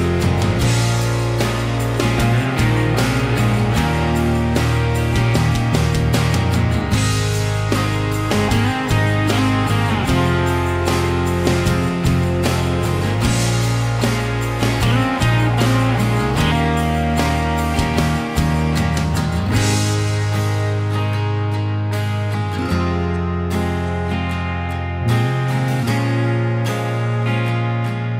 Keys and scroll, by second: 5.0 r, 7.5-13.2 typing, 11.1 Delete, 15.6 ctrl+g, 18.5-20.3 typing, 20.3 Escape, 22.5 m.